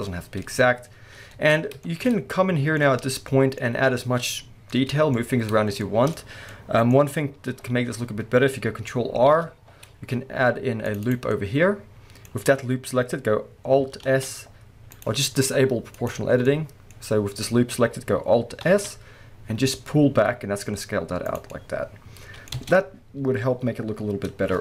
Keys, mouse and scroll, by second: 0.5-1.3 scroll up 2, 1.3 Tab, 2.1 scroll up 1, 7.0-9.3 scroll up 2, 9.3 ctrl+r, 11.1 click, 14.1 alt+s, 15.0 right click, 16.0 click, 16.1-21.3 middle drag, 16.4 scroll down 1, 18.6 alt+s, 21.3 click, 21.5-24.6 middle drag, 22.6 Tab.